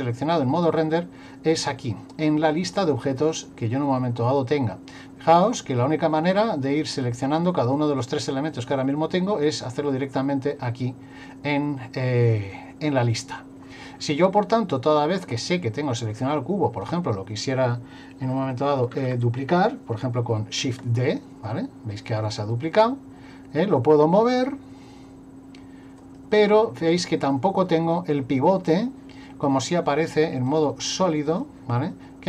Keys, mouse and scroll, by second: 5.3 click, 6.2 click, 6.9 click, 7.8 click, 8.5 click, 9.7 click, 16.9 right click, 20.6 shift+d, 30.5 click.